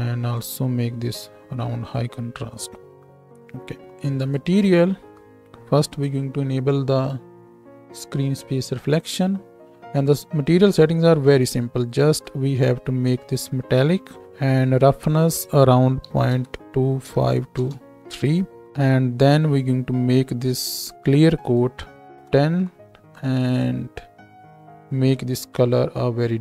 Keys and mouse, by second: 5.8 n, 7.0-11.2 right drag, 11.2-24.9 middle drag, 24.9-26.4 right drag.